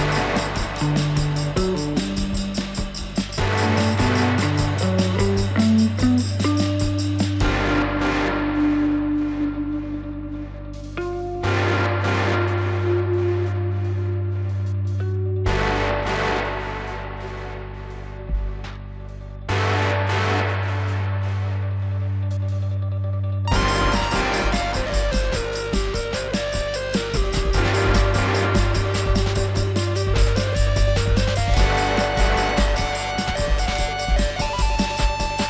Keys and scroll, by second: 2.0 F4, 9.7 F4, 22.5 F4, 26.7 alt+x, 30.2 F4.